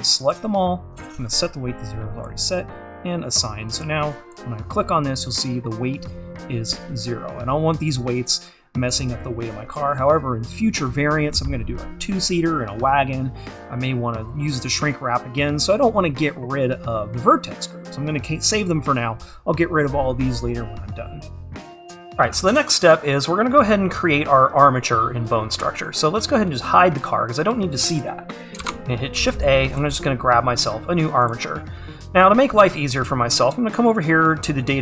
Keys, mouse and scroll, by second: 7.3-9.4 scroll up 1, 9.4-9.8 scroll down 1, 9.8 click, 22.4-23.9 scroll up 1, 27.0-29.8 drag, 29.8 shift+a.